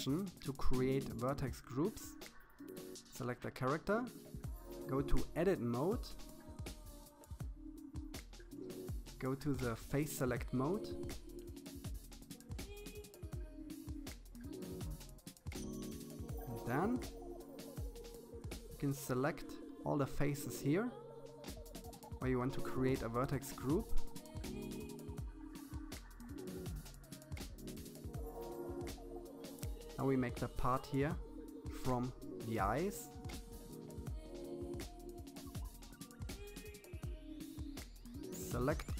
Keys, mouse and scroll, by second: 0.0 n, 1.4 click, 2.6-4.9 drag, 5.6 KP_3, 7.2 click, 7.7-8.4 scroll up 4, 8.4-9.9 shift+middle drag, 10.4 shift+z, 11.5-12.5 scroll up 1, 12.5-14.1 shift+middle drag, 14.1 c, 18.2-18.7 scroll up 3, 18.7-20.2 shift+middle drag, 21.0 c, 27.6 c.